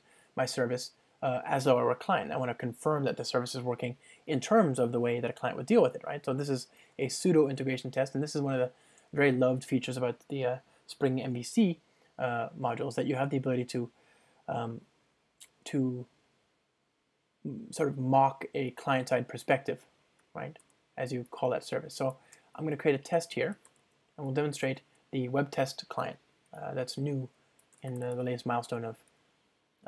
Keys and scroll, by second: 7.9 ctrl+shift+super+t, 24.7 Return.